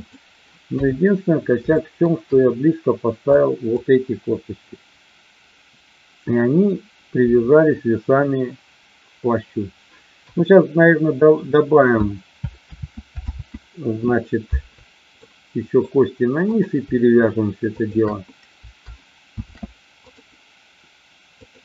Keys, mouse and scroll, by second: 0.6 KP_3, 1.6 shift+middle click, 3.4-3.7 drag, 10.1 KP_1, 12.6 ctrl+z, 13.2 ctrl+z, 15.2-15.7 middle drag, 16.5-17.4 drag, 17.7-18.6 shift+drag, 20.1 ctrl+shift+c, 21.4 click.